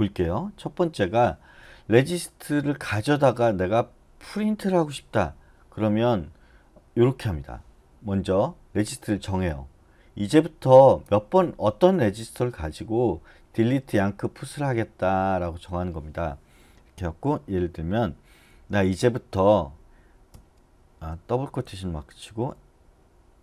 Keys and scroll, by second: 20.3 shift+'.